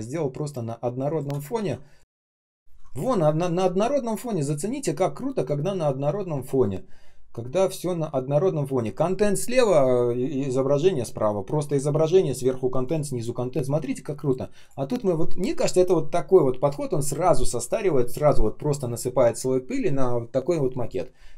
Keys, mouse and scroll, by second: 0.4 space, 1.5 ctrl+ы.